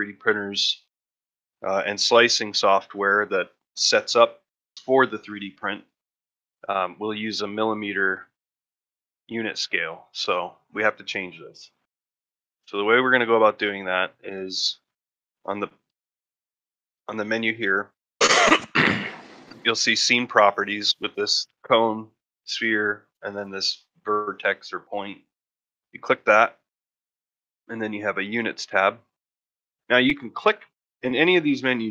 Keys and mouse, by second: 12.1-12.5 middle drag, 12.8 ctrl+middle drag, 13.1 shift+middle click, 13.4 middle drag, 13.8 middle drag, 25.2 click.